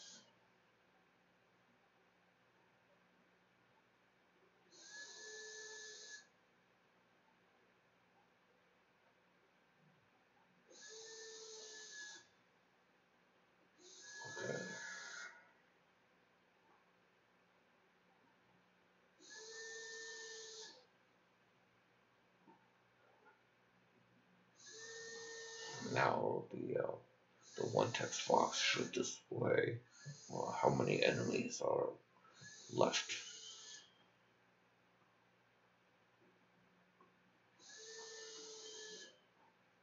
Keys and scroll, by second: 0.0-2.8 typing, 4.1-6.4 typing, 6.5 Delete, 6.8 End, 7.4 Delete, 7.9 \, 8.0 ], 8.1 [, 8.2 ;, 9.4-10.2 typing, 12.2 ctrl+z, 12.7 ctrl+s.